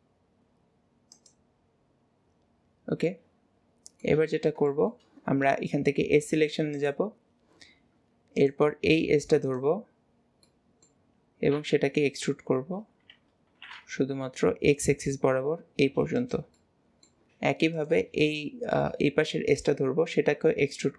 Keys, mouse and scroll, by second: 2.4-3.1 scroll down 1, 3.1-4.3 middle drag, 4.7-6.3 middle drag, 6.8 click, 8.4 click, 9.0 middle click, 9.5 click, 11.6-17.8 middle drag, 17.8 click, 17.8 middle click, 20.2-20.9 middle drag.